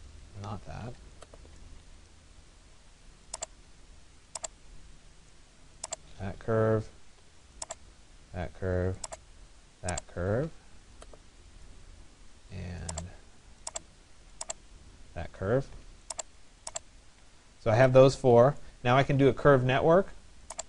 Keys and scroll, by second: 0.5 Escape.